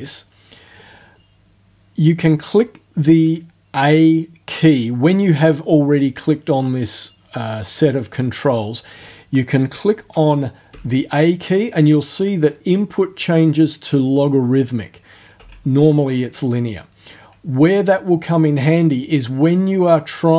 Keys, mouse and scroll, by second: 6.7-8.1 drag, 8.5 click, 10.7 a, 15.4 a, 19.3-20.3 drag.